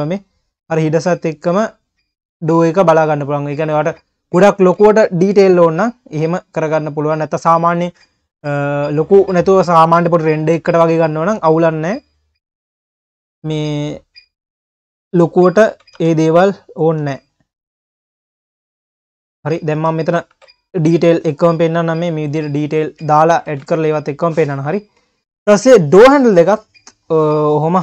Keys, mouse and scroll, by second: 0.3-0.9 scroll down 8, 2.6 click, 3.9-4.4 scroll down 10, 4.6 ctrl+s, 5.3 KP_Enter, 5.7 KP_3, 6.2 click, 6.5-7.3 scroll up 3, 7.3 click, 8.0-8.7 scroll up 2, 8.7 click, 9.5 click, 10.2-11.0 scroll up 7, 11.0 Tab, 12.0 click, 12.7 a, 13.0-13.4 scroll up 1, 13.4 s, 15.7 s, 17.0 Tab, 17.2-17.8 scroll down 6, 18.2 click, 18.5 scroll down 2, 18.8 Tab, 19.4 click, 19.8 Tab, 20.0 click, 20.4 ctrl+s, 20.8 scroll down 4, 21.0-21.3 scroll up 6, 21.3 q, 21.9-22.3 scroll down 8, 22.3 q, 22.6 ctrl+s, 23.0 q, 23.5 ctrl+s, 23.6-24.3 scroll down 2, 24.3-25.0 drag, 25.0 q.